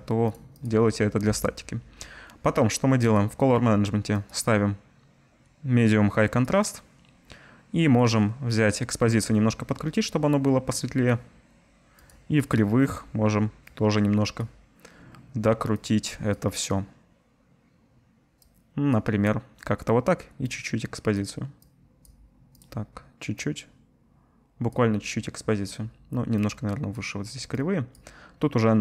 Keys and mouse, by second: 0.7-3.0 drag, 22.6 click.